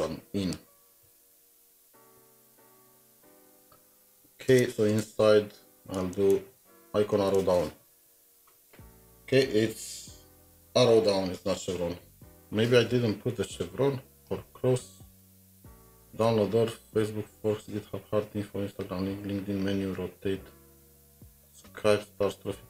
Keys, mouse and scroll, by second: 1.0 typing, 2.7 ctrl+Tab, 4.5 Return, 4.7 Tab, 6.2 typing, 12.1 ctrl+Tab.